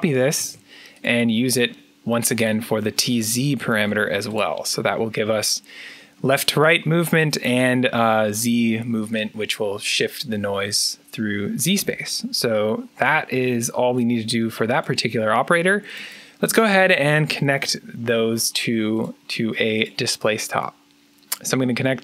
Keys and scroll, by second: 0.0-0.6 typing, 3.7 ctrl+v, 16.6-17.8 typing.